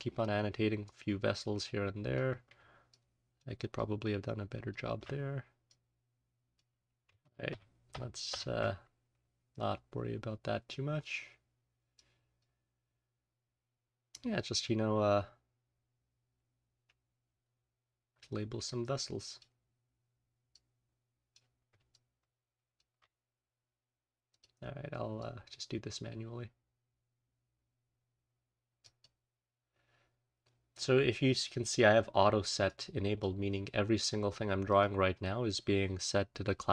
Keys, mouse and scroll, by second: 0.8-2.2 drag, 2.8 alt+click, 3.0-4.4 alt+scroll up 1, 3.7-4.8 alt+drag, 5.2-6.3 scroll up 1, 5.6-6.6 drag, 6.3-8.5 scroll up 1, 7.2 z, 7.9 ctrl+z, 8.2 ctrl+z, 8.7-9.7 scroll down 1, 9.7-11.0 scroll down 1, 11.0-12.5 scroll down 1, 11.9 click, 12.5-13.1 scroll down 1, 13.1-13.7 scroll down 1, 13.7-14.2 scroll down 1, 14.2-17.2 scroll up 1, 17.2-18.1 scroll down 1, 18.1-19.5 drag, 18.1-19.5 scroll down 1, 19.5 scroll down 1, 19.5-20.3 scroll up 1, 20.3 scroll up 1, 20.5 click, 21.7-22.4 alt+scroll up 1, 21.8 alt+click, 24.2 click, 25.1-28.9 drag, 29.0 click, 30.4-32.6 scroll up 1, 32.6 click, 34.6 click, 35.0-35.7 scroll down 1.